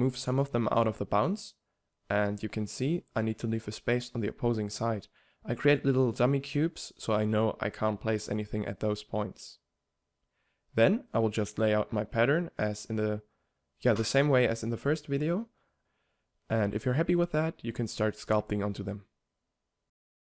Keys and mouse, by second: 0.0-7.5 typing, 2.3 Tab, 3.0 Tab, 5.1 right drag, 5.8 right click, 6.8 drag, 7.3 click, 7.6 drag, 8.5-9.2 drag, 8.8-12.2 typing, 9.8-10.3 drag, 12.0 click, 12.7-13.4 drag, 13.2-17.0 typing, 13.4 click, 15.2 click, 15.4-15.8 drag, 15.9 click, 16.2 click, 16.4-17.4 drag, 18.1-18.7 drag, 18.2-20.3 typing, 19.2 click.